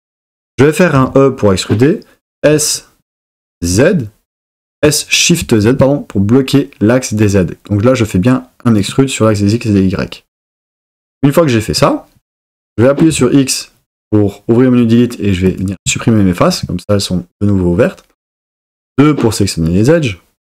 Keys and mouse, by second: 1.0 e, 2.4 s, 3.6 z, 5.4 shift+z, 8.8 click, 13.1 x, 18.7 2.